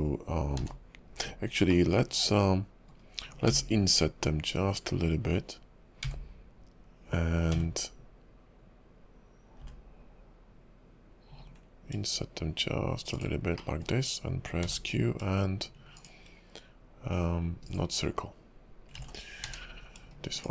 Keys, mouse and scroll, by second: 0.5 q, 1.7 middle click, 3.5 i, 13.5 middle click, 14.6 q, 17.6 right click, 19.0 ctrl+z, 19.4 q.